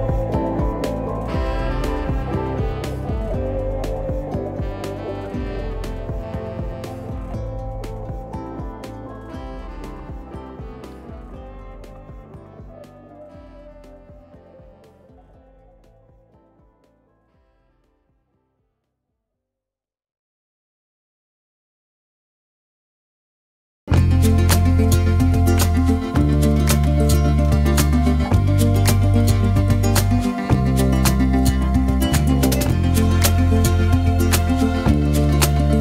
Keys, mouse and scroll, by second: 0.4 Tab, 1.7-2.7 scroll up 3, 2.7-4.3 scroll down 2, 4.3 alt+z, 5.7 alt+z, 6.9 click, 9.0-9.7 scroll up 4, 9.7-11.3 shift+middle drag, 11.3-12.3 scroll up 2, 12.3 shift+click, 16.0-17.2 drag, 17.2-18.1 scroll down 6, 18.1 shift+middle click, 18.8 Tab, 20.1 click, 20.7-21.7 shift+middle drag, 21.7 click, 24.2 Tab, 25.0-26.3 scroll up 1, 26.4 click, 27.7-28.4 scroll up 3, 28.4 shift+scroll up 1, 28.5-29.9 shift+middle drag, 29.9-31.1 scroll up 3, 31.1 shift+click, 32.3-33.2 scroll down 7, 33.2-34.4 shift+middle drag, 34.4-35.3 scroll up 1, 35.3 Tab.